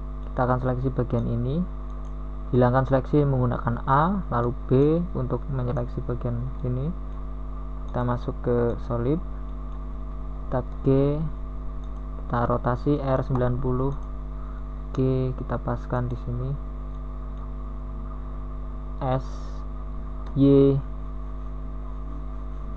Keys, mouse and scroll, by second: 3.2 b, 4.6 KP_1, 8.4 u, 12.3 a, 15.2 a, 15.2 b, 15.8 a.